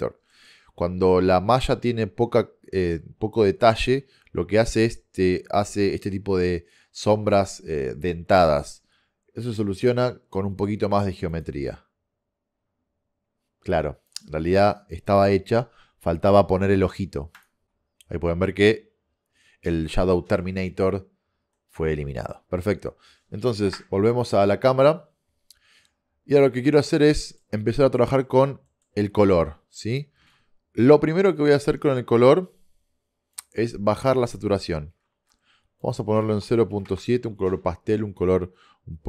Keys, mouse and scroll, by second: 0.2 middle click, 0.6 middle click, 10.4 click, 10.7 click, 11.8 click, 12.1 click, 14.6-15.9 drag, 21.8 middle click, 22.2 middle click, 23.7 KP_0, 26.2-27.4 middle drag, 29.5 click, 30.3 shift+a, 34.3 click.